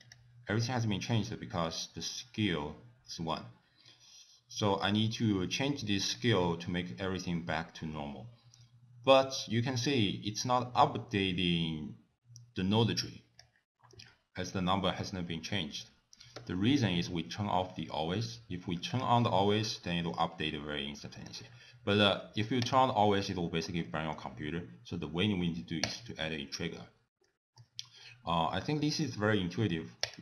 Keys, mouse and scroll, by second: 0.0 click, 1.7-2.1 scroll up 3, 6.2 click, 16.4 t, 18.9 click, 20.1 click, 22.6 click, 23.8 middle click, 25.9 click, 26.9 scroll down 2, 27.2 middle click, 28.0-28.8 scroll down 5, 30.1 click.